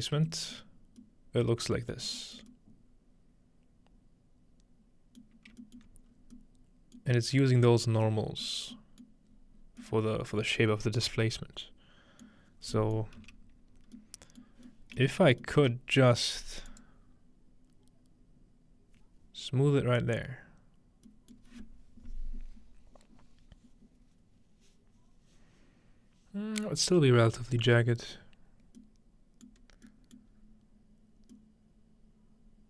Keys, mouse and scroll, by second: 0.6-1.0 shift+middle drag, 2.1 shift+middle click, 2.5 middle click, 2.6-5.2 scroll up 1, 5.3 alt+middle click, 5.8 alt+middle click, 6.1-8.0 scroll up 1, 7.2 middle click, 8.5 middle click, 9.0-9.8 middle drag, 9.3-10.8 scroll down 1, 12.5-14.0 scroll down 1, 15.0-16.8 shift+middle drag, 16.7-18.7 drag, 21.3-24.7 middle drag, 27.7 scroll up 2, 28.3 scroll down 2, 28.8 middle click, 29.9 middle click, 30.3-31.1 scroll up 2, 30.5-32.6 middle drag, 31.1 scroll down 2.